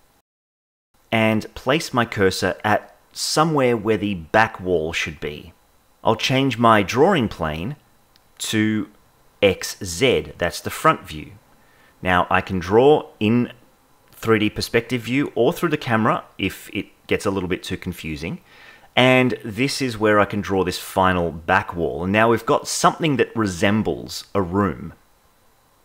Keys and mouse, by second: 0.0 click, 0.2-2.0 shift+middle drag, 2.0 KP_7, 3.3-4.5 drag, 6.2 KP_0, 8.5-10.5 drag, 11.4 click, 12.1 click, 12.7 click, 13.8 click, 14.1 click, 14.4 click, 14.6 click, 14.8 click, 15.1 click, 15.3 click, 15.6 click, 15.9 click, 16.1 click, 16.2 click, 16.7 click, 16.9 click, 17.3 click, 17.8 click, 18.2 click, 18.4 click, 18.8 click, 19.2 click, 19.6 click, 19.9 click, 20.2 click, 20.3 click, 20.6 click, 20.9 click, 21.1 click, 21.2 click, 21.9-24.5 shift+middle drag.